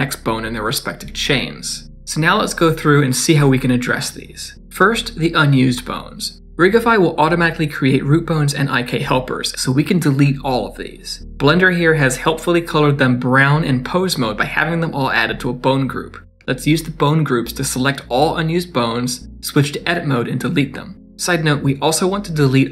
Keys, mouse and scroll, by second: 1.7 d, 1.8 right click, 2.2 d, 2.5 scroll down 5, 3.1 middle click, 3.5 scroll down 3, 3.7 shift+middle click, 5.5 click, 5.7 click, 6.1 shift+click, 6.3 middle click, 6.5-6.9 scroll up 2, 6.8 Tab, 7.4 middle click, 7.8 click, 8.1 shift+middle click, 8.2 scroll up 3, 8.5 shift+middle click, 8.8-9.5 scroll down 4, 8.9 click, 9.2 shift+middle click, 9.5 middle click, 10.5-10.8 ctrl+z, 11.0 ctrl+z, 11.1 middle click, 11.2 shift+middle click, 11.3 Tab, 11.4 click, 11.9 click, 12.6 Tab, 13.1 scroll up 2, 13.4 middle click, 14.1 shift+middle click, 14.8 click, 19.4 click, 19.4 middle click, 19.7 Tab, 20.2 middle click, 20.6 x, 21.8 middle click.